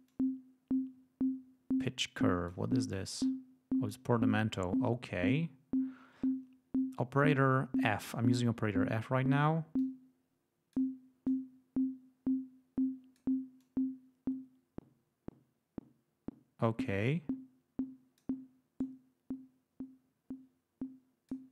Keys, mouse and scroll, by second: 0.0-2.6 drag, 2.8-4.0 drag, 9.7-10.8 drag, 11.2-13.3 drag, 13.5-18.3 drag, 18.7-21.4 drag.